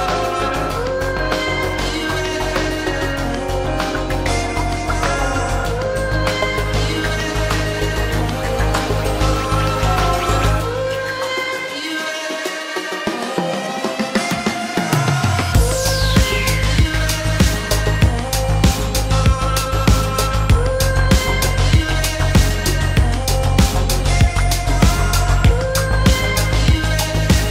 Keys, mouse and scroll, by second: 1.6 space, 2.4 shift+middle click, 3.4 shift+middle click, 3.5 shift+double middle click, 6.2 shift+middle click, 7.4 shift+click, 7.4 shift+double click, 7.9 shift+click, 9.2 shift+click, 10.1 shift+click, 10.4 shift+middle click, 10.6 shift+double middle click, 16.7 shift+click, 17.4 shift+click, 17.8 shift+middle click.